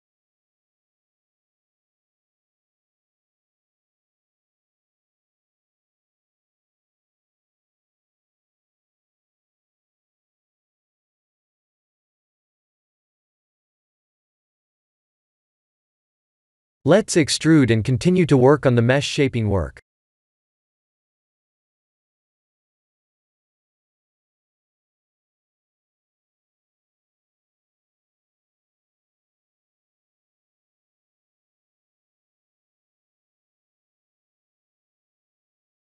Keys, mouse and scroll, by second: 0.9 click, 1.2 b, 2.6 g, 5.2 click, 5.7 b, 6.4 g, 7.6 ctrl+z, 7.9 click, 8.3 b, 9.5 g, 12.2 click, 13.3 Tab, 14.4 middle click, 14.9 middle click, 15.1 Tab, 15.8 3, 16.4 a, 17.0 e, 21.7 Tab, 22.0 middle click, 25.4 Tab, 26.5 middle click, 27.4 Tab, 28.0 Tab, 28.2 middle click, 30.0 middle click, 30.4 middle click, 30.7 middle click, 30.8 middle click, 31.2 middle click, 34.4 middle click, 34.7-35.3 scroll up 5, 35.4 shift+middle click, 35.6 middle click.